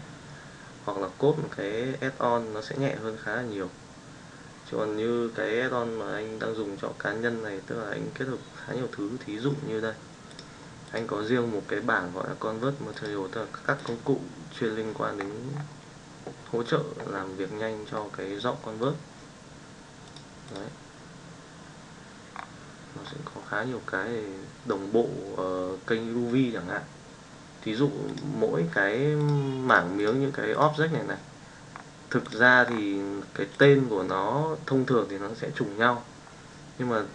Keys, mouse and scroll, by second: 10.2 click, 10.8 click, 12.9 click, 13.7 click, 17.9 middle click, 20.0 click, 20.4 click, 28.0 click, 29.1 click, 29.6 drag, 30.0 click, 33.4 click.